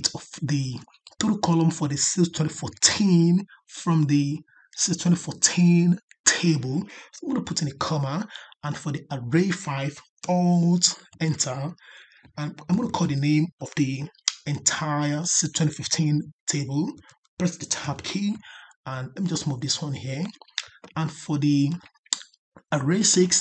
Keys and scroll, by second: 11.0 alt+Return.